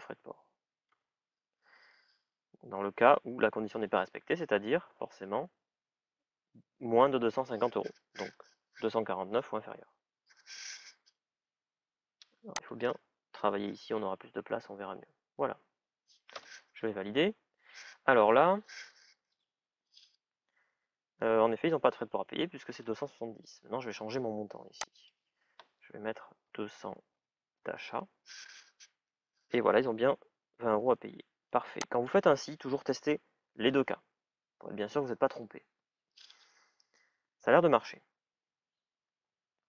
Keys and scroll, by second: 0.8 BackSpace, 16.1 Return, 26.3 shift+é, 27.5 Return.